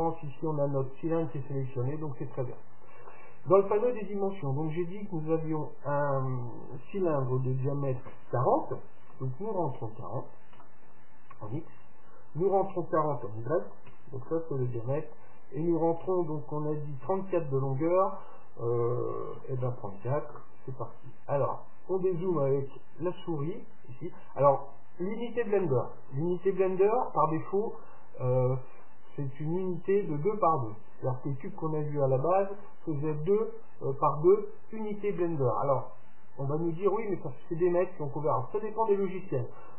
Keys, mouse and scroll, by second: 4.4-6.3 drag, 12.4-14.2 drag, 15.9-17.7 drag, 21.8-25.9 middle drag.